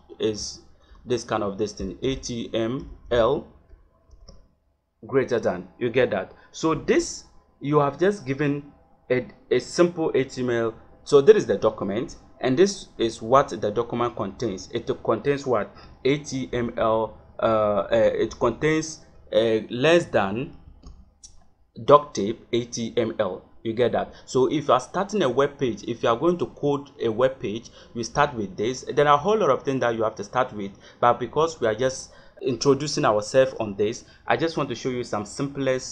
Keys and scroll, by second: 0.0-0.2 typing, 1.7 h, 2.0 t, 2.8 m, 3.0 l, 4.0 shift+., 16.4 Left, 20.6 shift+1.